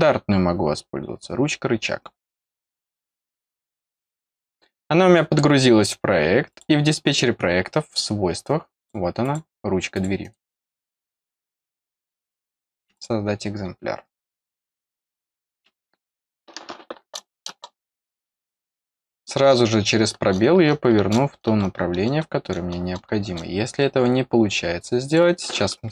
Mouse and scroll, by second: 2.2 click, 2.3 click, 6.4 click, 7.8 click, 8.7 click, 9.2 click, 9.9 click, 12.9 click, 18.7 click, 25.0 click.